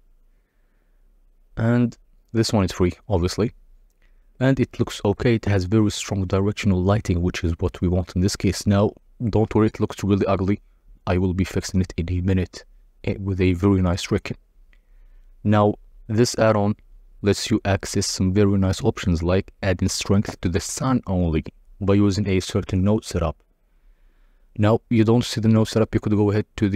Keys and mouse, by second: 1.5 z, 8.0-17.2 drag, 18.1-19.4 drag, 20.2-22.0 drag, 22.9-24.0 drag.